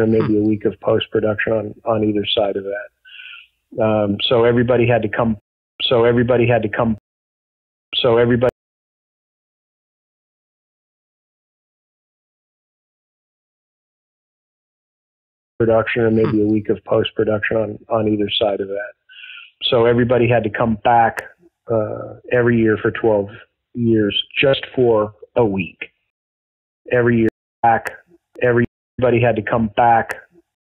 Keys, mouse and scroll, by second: 1.1 click, 2.1 click, 2.5 click, 3.5 click, 5.3 space, 5.6 click, 5.7 space, 6.2 click, 6.9 space, 7.5 ctrl+shift+Delete, 7.8 space, 8.4 space, 8.7 click, 9.6 click, 10.5 click, 11.5-13.1 drag, 13.5 Delete, 14.4 click, 15.4 click, 15.5 space, 16.4 click, 17.2 click, 17.9 click, 18.8 click, 19.2 ctrl+s, 20.3-21.3 drag, 22.7 click, 24.4-26.0 drag, 26.0 space, 26.5 ctrl+shift+Delete, 26.8 space, 27.2 space, 27.5 click, 27.5 space, 28.5 space, 28.8 click, 28.9 space, 30.4 space.